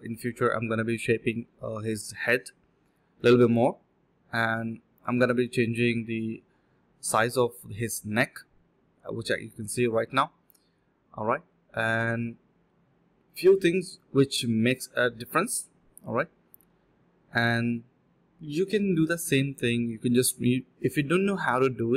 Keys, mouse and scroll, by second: 1.0 alt+click, 1.5 scroll down 1, 1.7 middle click, 2.4 scroll up 1, 2.6 middle click, 3.6 alt+click, 3.8 alt+click, 4.2 d, 4.8 ctrl+shift+click, 5.3-6.9 typing, 7.1 ctrl+b, 8.9-9.7 typing, 13.6-13.9 typing, 17.2 typing, 17.7 alt+click, 18.0 alt+click, 18.1 alt+click, 19.4 alt+click, 19.6 alt+click, 19.8 alt+click, 19.8 alt+click, 20.0 alt+click, 20.1 alt+click, 21.6 d.